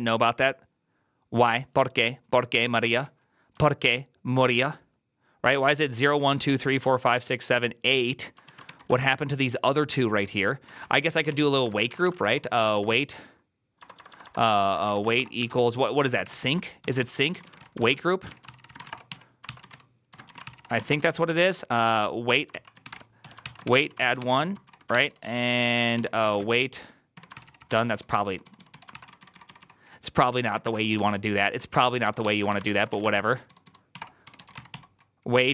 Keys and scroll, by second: 2.6 ctrl+a, 2.8 2, 8.3 ctrl+a, 8.5-35.5 typing, 8.8 ctrl+c, 22.1 Tab, 22.4 ctrl+c, 23.3 ctrl+c, 23.8 ctrl+c.